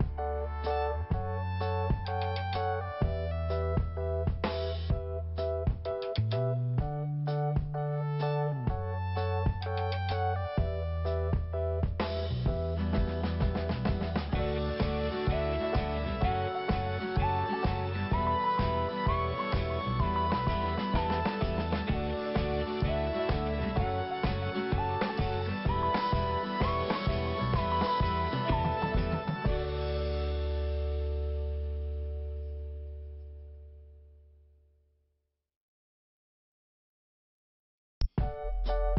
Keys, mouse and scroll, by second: 1.8 click, 4.2 click, 4.2 click, 4.6 click, 6.5 scroll down 1, 7.3 click, 7.4 click, 8.5 click, 8.9 scroll down 1, 9.7 click, 9.8 click, 11.8 click, 12.9 click, 14.6 click, 14.7 click, 15.3 click, 16.7 scroll up 2, 17.1 click, 17.2 click, 17.5 click, 19.9 click, 20.0 click, 20.3 click, 22.1 click, 23.1 scroll down 1, 23.8 scroll up 1, 25.7 scroll down 1, 27.2 p, 28.8 click, 30.0 scroll down 2, 30.8 scroll up 2, 32.5 click, 32.6 click, 33.1 click, 33.1 click, 33.6 scroll down 2, 35.2 click, 36.7 scroll up 1, 38.0 5.